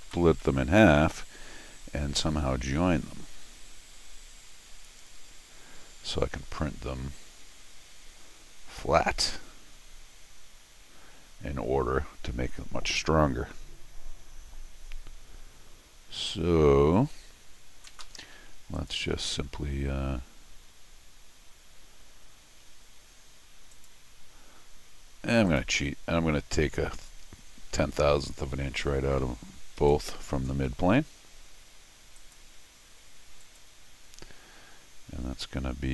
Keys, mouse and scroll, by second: 0.3 scroll up 2, 0.4 middle click, 17.9 Escape, 18.0 Escape, 18.7 click, 19.0 c, 23.7 click, 24.7 middle click, 25.5 click, 29.8 alt+x, 32.2 click, 33.4 click.